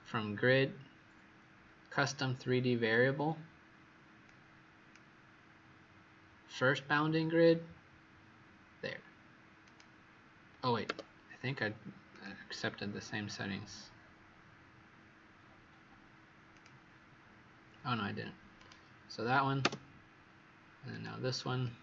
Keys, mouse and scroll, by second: 10.8 Escape, 12.0 click, 20.8 click.